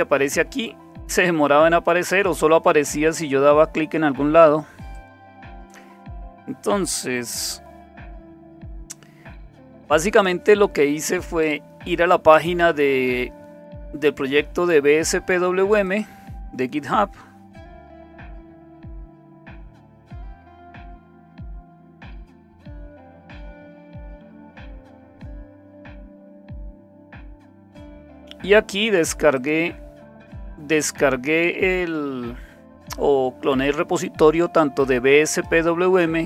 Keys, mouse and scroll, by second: 4.9 click, 8.2 super+7, 13.9 click, 15.8 click, 17.6 click, 17.9 click, 18.5-19.6 typing, 20.9-22.6 typing, 22.9 Return, 24.5-25.1 scroll down 1, 25.4 click, 29.3 click, 35.3 click, 36.0-36.2 scroll down 2.